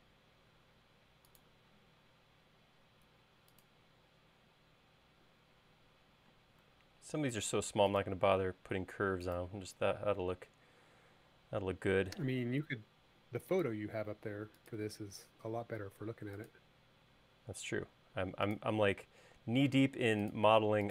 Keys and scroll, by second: 7.0 l.